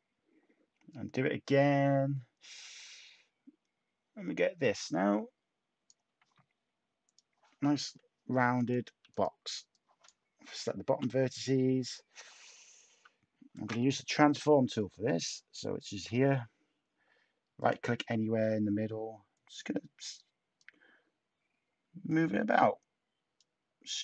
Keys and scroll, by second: 7.8 Tab, 9.0 Tab, 13.5 ctrl+t.